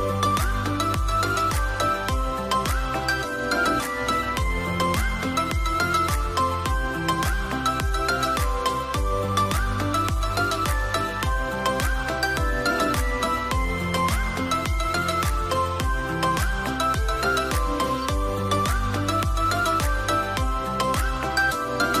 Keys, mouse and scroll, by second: 4.4 scroll up 1, 4.6 0, 4.8 Return, 18.1 Return.